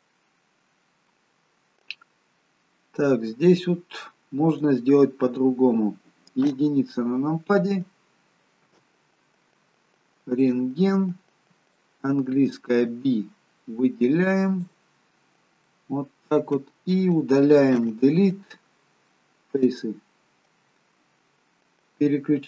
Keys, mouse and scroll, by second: 3.8-4.5 scroll down 2, 4.5 click, 4.5-5.4 scroll down 1, 6.5 KP_1, 10.5 click, 11.0 b, 15.2-17.5 scroll up 3, 15.7 middle click, 17.8 Delete.